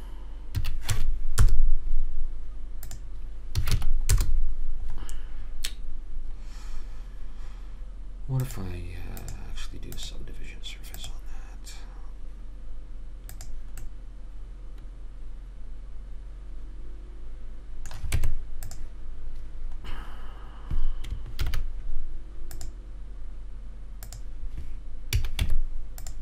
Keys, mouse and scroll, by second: 8.7-11.9 drag, 14.2-15.3 middle drag, 18.5 Tab, 21.8 ctrl+r, 25.4 a, 25.8 Tab.